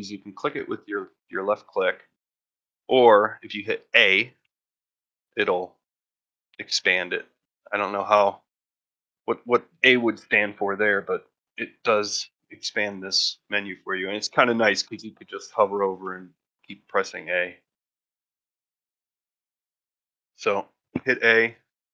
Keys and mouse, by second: 20.0 a.